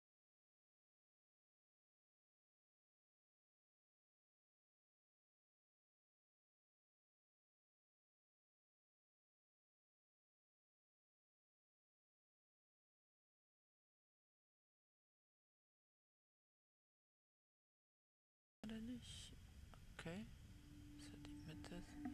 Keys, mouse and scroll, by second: 0.5 scroll down 3, 3.2-6.7 drag, 6.8-7.3 scroll up 5, 12.6-15.0 scroll down 1, 15.0-16.8 scroll down 1, 16.8-17.6 scroll up 2.